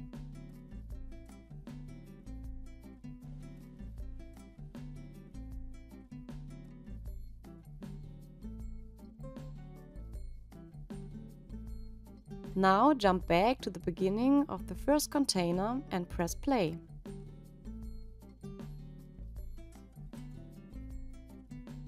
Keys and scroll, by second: 13.6 space.